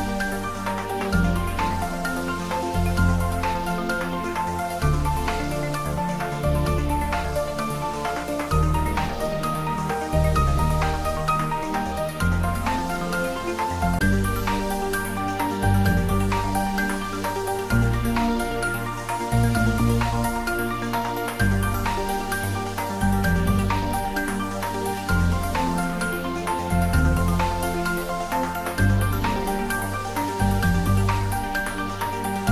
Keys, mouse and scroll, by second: 0.7 scroll up 1, 1.2-3.8 drag, 3.8 shift+d, 4.2 r, 6.9 click, 7.6 ctrl+z, 8.6 shift+d, 13.1 click, 14.1 scroll down 1, 16.9-18.9 drag, 18.9 scroll down 1, 19.9-21.7 typing, 22.8 click, 23.2 scroll up 1, 24.2 ctrl+z, 25.7 shift+d, 26.1 r, 27.7-28.6 typing, 29.4 click, 30.2-31.3 typing.